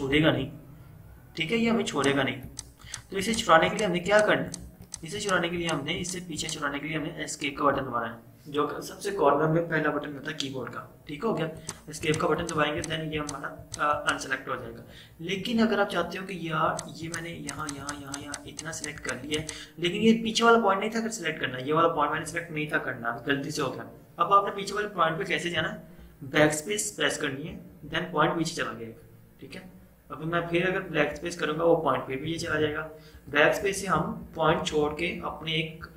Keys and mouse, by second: 2.0 click, 7.6 Escape, 11.6 click, 14.7 Escape, 16.7 click, 17.5 click, 27.6 BackSpace, 31.2 BackSpace, 33.2 BackSpace.